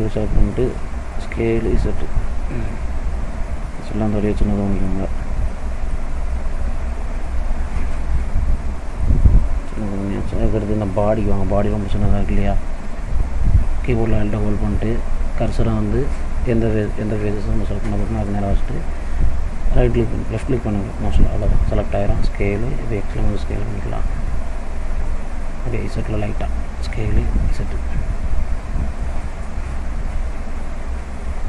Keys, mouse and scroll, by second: 1.2 s, 3.8 middle click, 5.1-5.5 scroll up 1, 5.5 middle click, 6.2-6.8 scroll up 1, 7.2 click, 8.0 middle click, 9.2-9.5 scroll down 2, 9.5 middle click, 12.3 click, 21.1 alt+click, 22.2 s, 25.5 middle click, 26.8 s.